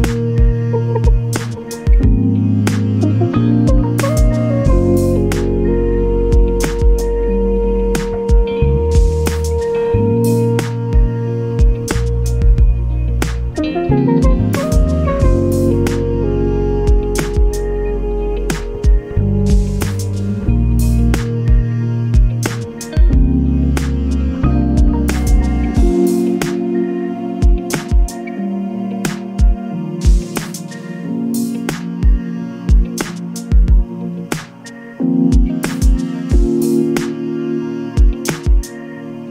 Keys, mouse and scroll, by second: 0.3 click, 2.4-3.1 ctrl+scroll up 4, 3.4 ctrl+click, 5.9 ctrl+d, 8.6 ctrl+y, 9.7 ctrl+click, 11.1 click, 12.8 click, 13.9 ctrl+d, 15.5 click, 17.0-18.6 drag, 19.7 click, 20.3 click, 21.6 ctrl+click, 23.8 click, 25.4-27.3 drag, 28.2 shift+click, 32.6 click, 34.2 click, 35.4 space, 36.6 scroll up 1, 36.6 click, 38.4 click.